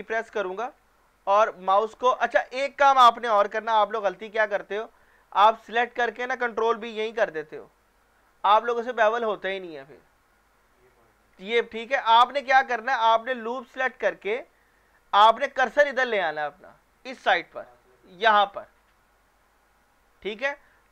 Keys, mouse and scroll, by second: 0.2 ctrl+b, 2.4 Escape, 3.3 ctrl+z, 3.8-4.3 scroll down 1, 4.3 scroll up 1, 5.7 alt+click, 7.0 ctrl+b, 11.0 Escape, 11.9 ctrl+z, 12.4-13.2 scroll down 1, 13.8 alt+click.